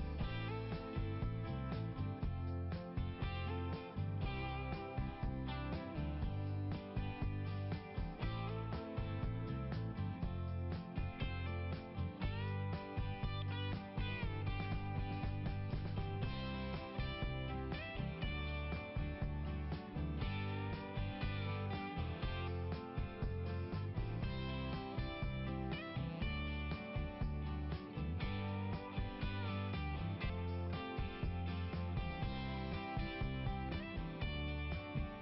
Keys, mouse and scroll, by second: 0.9 click, 1.5 click, 3.7-4.8 scroll up 1, 6.2-6.6 scroll up 2, 10.6-12.4 scroll down 1, 14.2-16.6 scroll up 5, 17.2 click, 21.5-22.1 scroll up 3, 22.5 scroll down 1, 22.7 scroll up 1, 22.8 scroll down 1, 22.9 scroll up 1, 23.1 scroll down 1, 25.7 scroll up 1, 26.4 scroll up 1, 27.7 click, 28.2 right click, 30.6 click, 31.7 right click, 33.3 click, 34.4 click.